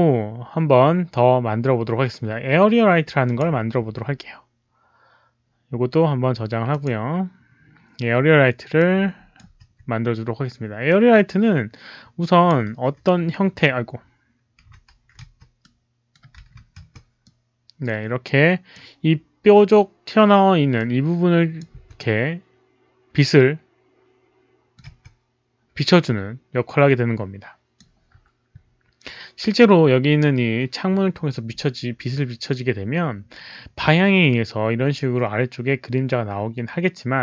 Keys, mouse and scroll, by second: 3.2 click, 6.6 click, 8.7-9.3 drag, 9.5 d, 10.8-12.4 drag, 14.3-16.4 typing, 14.5 click, 15.6-16.4 middle drag, 17.2-18.7 drag, 20.7 click, 21.7 w, 21.9-24.8 middle drag, 24.8 e, 26.0 click.